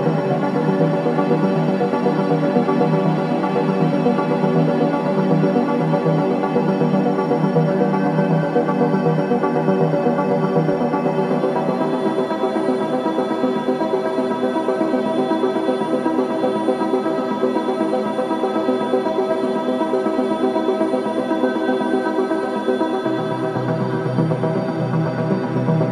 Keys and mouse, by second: 0.4 Tab, 1.5 BackSpace, 1.7 space, 3.1 Tab, 3.5 g, 3.8 x, 5.2-7.7 drag, 9.2 Tab, 10.4 BackSpace, 10.9 BackSpace, 10.9 BackSpace, 13.5 shift+5, 13.7 space, 15.2 Tab, 15.6-16.0 typing, 17.7 click, 19.4-20.5 typing, 20.6-23.8 drag, 24.4 shift+click, 25.1-25.9 typing.